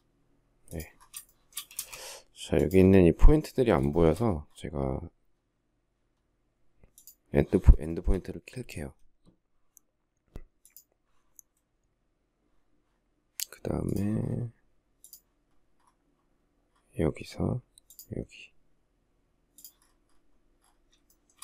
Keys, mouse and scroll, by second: 0.6 shift+middle click, 1.1 space, 3.3 shift+middle click, 7.2 shift+middle click, 20.3 shift+middle click.